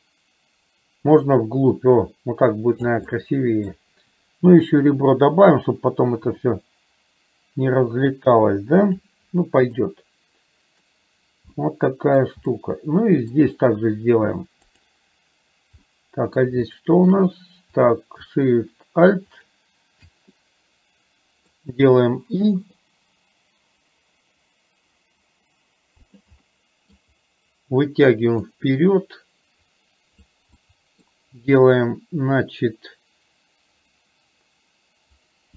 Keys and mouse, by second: 3.1 middle click, 9.9-10.9 middle drag, 11.6 middle click, 12.6 middle click, 14.9 click, 15.9 middle click, 16.8 shift+middle click, 19.5 click, 20.5-21.5 middle drag, 26.5 middle click, 28.8-30.4 drag, 30.6 middle click.